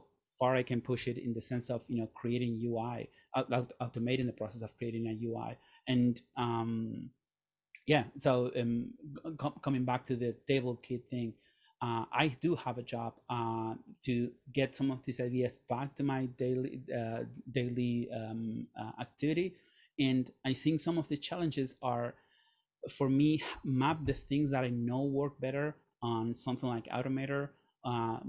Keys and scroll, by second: 1.1 Delete.